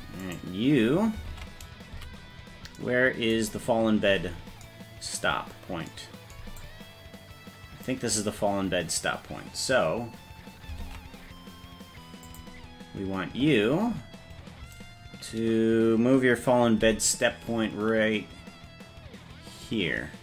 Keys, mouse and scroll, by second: 0.3 right click, 1.3 ctrl+Tab, 2.0 a, 4.4-5.3 scroll up 1, 5.3 scroll up 9, 6.7-7.9 drag, 10.8 ctrl+Tab, 12.2 click, 16.9 g.